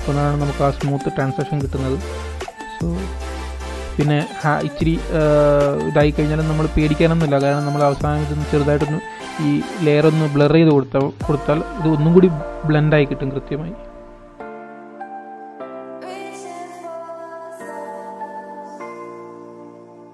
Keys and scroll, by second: 8.4 super+z, 8.6 super+z, 8.8 super+z, 9.2 super+z.